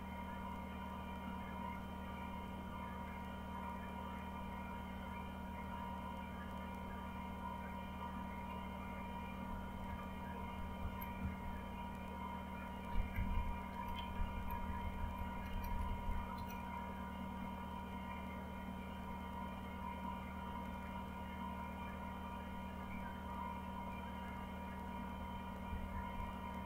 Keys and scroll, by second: 9.8 Up, 10.7 Up, 11.1 Right, 11.7 Right, 12.9 Left, 13.1 Left, 13.3 Left, 14.0 Delete, 14.2 Delete, 14.3 Delete, 14.4-15.5 Delete, 26.1 Down, 26.5 Down.